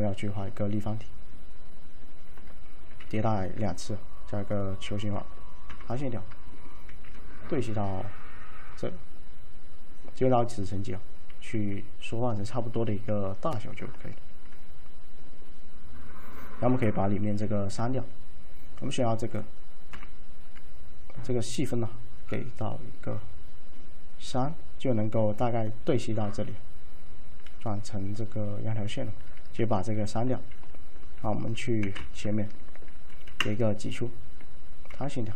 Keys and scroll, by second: 3.1 z, 3.2 z, 5.8 F5, 7.0 shift+4, 11.6 r, 17.4 d, 20.0 F6, 29.8 d, 31.9 f, 33.4 `, 35.0 F5.